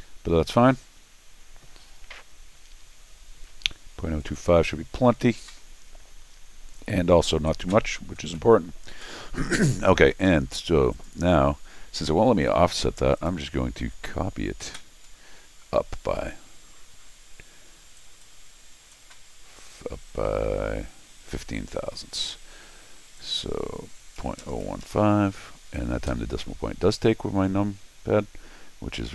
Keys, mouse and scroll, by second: 4.2 click, 10.9 click, 13.2 click, 15.5-15.9 scroll down 4, 16.3 middle click, 16.3 scroll up 2, 18.0 click, 23.2 click, 27.7 middle click, 27.9 middle click.